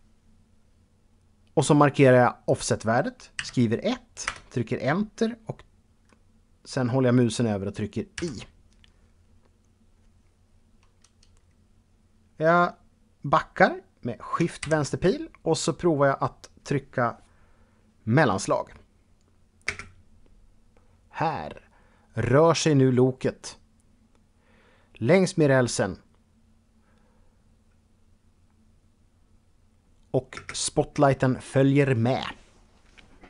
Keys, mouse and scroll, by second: 2.0 click, 2.9 KP_1, 3.8 Return, 7.7 |, 14.2 shift+Left, 19.2 space, 29.9 space.